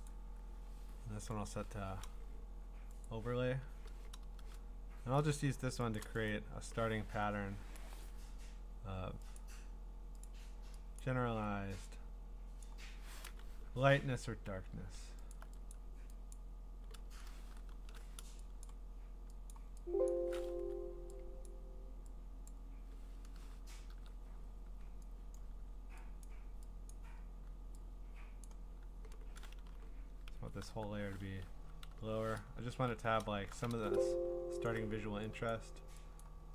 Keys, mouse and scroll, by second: 5.3 click, 6.0 click, 6.3 right click, 7.7-9.3 scroll, 9.4 click, 10.2 click, 11.0 click, 12.6 click, 15.3 alt+click, 15.7 click, 16.3 click, 17.7 alt+click, 18.6 click, 18.6 ^, 19.5 click, 20.1 click, 20.5 Escape, 21.5 click, 22.5 click, 23.6 %, 25.4 click, 26.3 click, 27.0 click, 28.5 click, 30.3-31.6 typing, 32.9-33.7 typing, 34.7 alt+click, 35.5 click, 36.2 click.